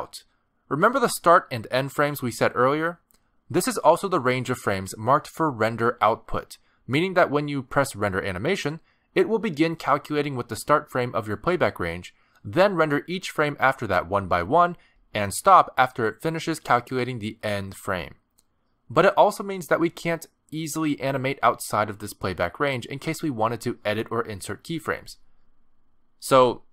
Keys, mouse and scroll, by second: 3.3 space, 6.7 space, 6.8 click, 7.3 r, 8.9 click, 9.4 click, 9.9 r, 10.5 space, 11.1 space, 11.7 click, 24.0 middle click, 24.5 space.